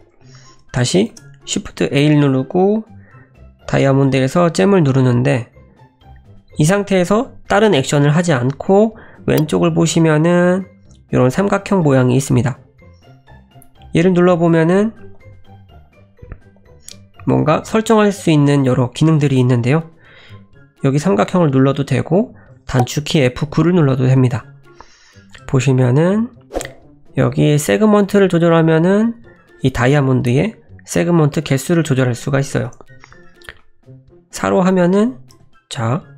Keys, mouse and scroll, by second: 1.1 shift+a, 5.7-8.9 scroll down 4, 13.4 click, 15.1 click, 16.6 click, 21.5 click, 23.4 F9, 33.4-33.9 scroll down 2, 33.6 middle click, 35.3 /, 35.8 middle click.